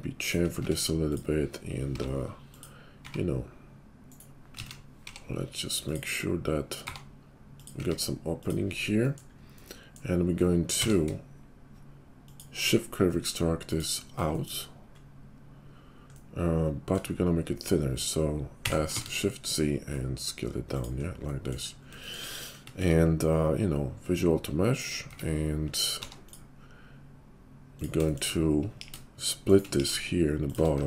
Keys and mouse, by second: 0.5 Tab, 1.1-4.5 middle drag, 1.9 i, 3.0 e, 4.5 ctrl+click, 4.5 ctrl+z, 4.6-11.1 middle drag, 5.0 i, 6.7 e, 7.8 s, 10.6 q, 11.1-12.7 shift+drag, 12.7-14.2 middle drag, 14.2 shift+click, 14.6-18.9 middle drag, 18.4 s, 18.9 shift+click, 19.1-21.5 middle drag, 22.8 ctrl+a, 25.0 Tab, 25.9 ctrl+r, 28.7 ctrl+b, 29.7 ctrl+b, 30.6-30.8 middle drag, 30.7 Tab.